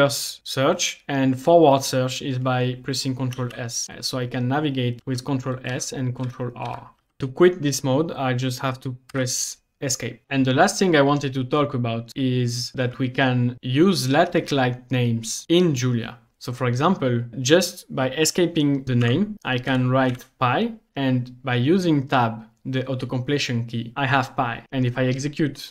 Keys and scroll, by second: 3.4 ctrl+s, 3.8 ctrl+s, 5.0 ctrl+s, 5.7 ctrl+r, 6.3 ctrl+r, 7.0 ctrl+s, 9.2 Escape, 19.1-20.2 typing, 23.9 Tab.